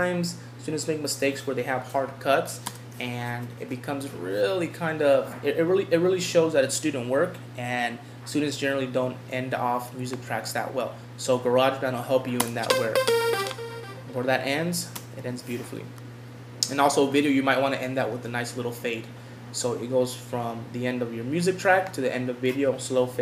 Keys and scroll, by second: 3.5 Home, 15.8 Home.